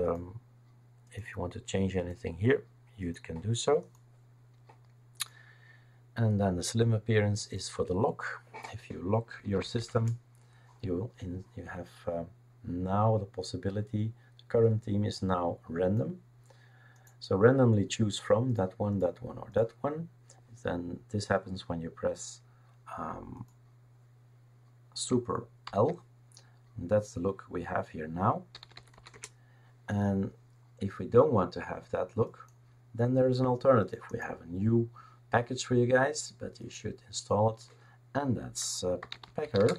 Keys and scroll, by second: 9.1-10.3 typing, 25.7 super+l, 28.3-29.4 typing, 38.8-39.7 typing.